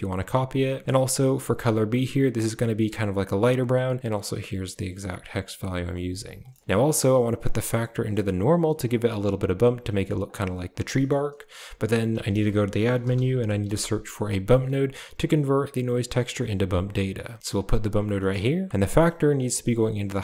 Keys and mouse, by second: 1.4 click, 6.4 middle click, 6.7 click, 7.3-8.6 drag, 10.1 click, 10.8 middle click, 12.0 shift+a, 18.1 middle click, 19.2-20.2 drag.